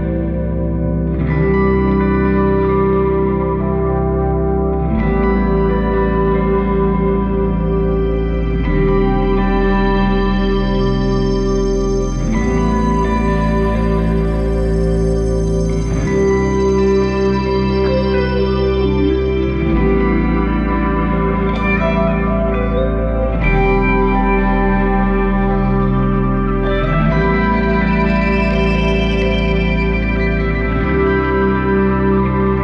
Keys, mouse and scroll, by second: 0.0-0.6 scroll up 4, 0.6-1.6 middle drag, 1.6 drag, 2.9-5.7 middle drag, 5.7-8.0 drag, 8.0-8.3 scroll down 4, 8.3 middle click, 9.2 drag, 12.6 scroll down 9, 13.5-14.3 scroll down 8, 14.3-15.8 middle drag, 15.8 click, 16.6 click, 18.0-19.1 drag, 19.1-19.4 scroll down 4, 19.4-22.2 middle drag, 22.2 shift+a, 25.7 shift+a, 29.0-29.7 scroll up 2, 29.7 click, 31.5 middle click, 32.3 shift+a.